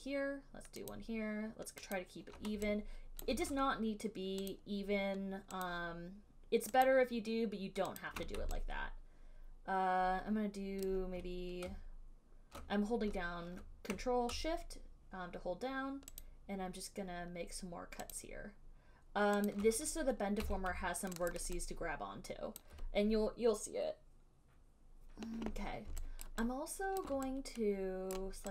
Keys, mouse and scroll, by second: 0.1 ctrl+click, 1.1 ctrl+click, 2.1 ctrl+click, 3.5 alt+click, 4.8 ctrl+right click, 5.9 ctrl+right click, 7.1 ctrl+right click, 8.3 ctrl+click, 11.1 alt+click, 16.4 click, 18.4 click, 19.7 click, 20.6 q, 21.6 click, 23.0 click, 26.5 alt+click, 27.2 alt+click, 28.4 right click.